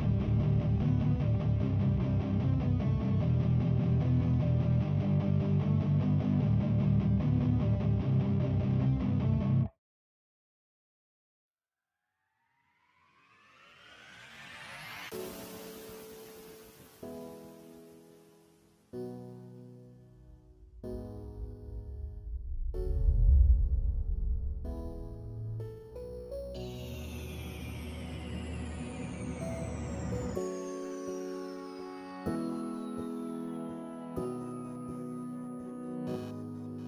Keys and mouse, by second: 3.1 click, 3.7 3, 3.9 click, 4.2 shift+click, 4.4 shift+click, 4.7 /, 5.1 ctrl+middle click, 5.7 shift+click, 6.0 alt+click, 6.7 alt+shift+click, 6.9 alt+shift+click, 7.2 c, 7.4 x, 8.1 /, 9.2 1, 9.4 right click, 9.4 space, 10.0 alt+click, 10.9 click, 11.3 click, 11.5 click, 12.2 click, 12.4 alt+click, 12.8 click, 13.3 click, 13.8 alt+click, 14.7-16.0 drag, 16.1 alt+click, 17.2 click, 17.6 click, 18.3 click, 18.8 click, 19.3 click, 20.9 right click, 21.1 click, 21.3 click, 21.6 click, 22.1 middle click, 22.9 click, 23.5 shift+click, 23.8 click, 24.2 click, 25.2 Tab, 25.4 click, 26.0 click, 27.3 alt+click, 28.0 Tab, 28.8 x, 29.2 Tab, 29.4 alt+drag, 29.6 alt+right drag, 29.7 alt+click, 30.1 click, 30.5 shift+d, 30.8 s, 31.5 click, 32.0 click, 33.6 Tab, 34.0 3, 34.7 ctrl+click, 34.9 x, 35.9 x, 36.4 alt+click.